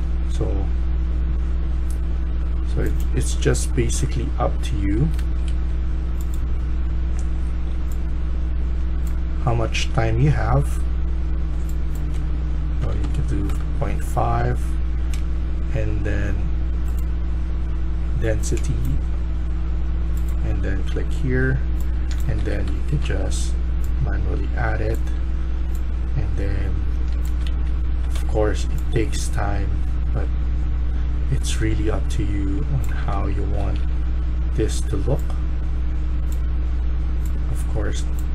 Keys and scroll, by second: 5.0 Escape, 5.4 Escape, 12.7 typing, 13.4 Return, 21.0-23.5 typing, 24.7 d, 26.7-28.5 typing, 32.7-34.2 typing.